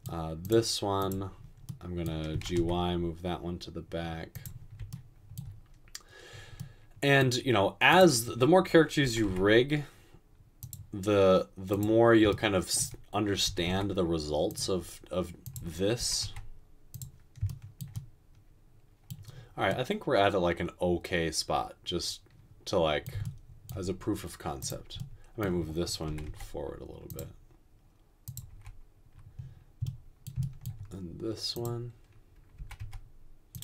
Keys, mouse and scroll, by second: 2.4 typing, 9.1 typing, 13.6 typing, 16.0 typing, 26.1 typing, 28.5 typing, 32.7 typing.